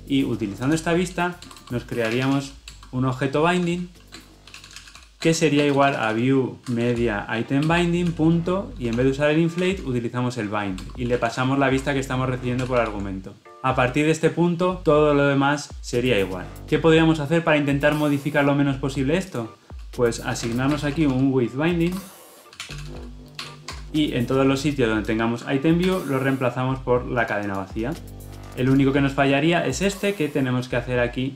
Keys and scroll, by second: 2.7 Return, 7.6 Return, 11.7 Escape, 12.5 ctrl+alt+l, 12.7 ctrl+alt+o, 21.9 Return, 25.9 ctrl+r.